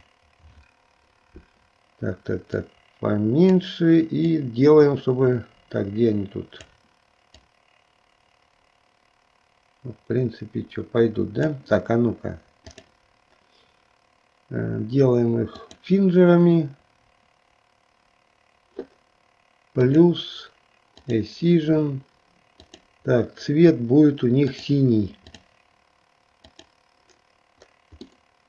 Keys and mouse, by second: 2.5-3.8 drag, 4.3-6.9 drag, 7.3-11.5 drag, 12.7 click, 15.7 click, 19.9 click, 21.0 click, 22.7-24.8 drag, 25.5 click, 26.5 click, 28.3-28.4 middle drag.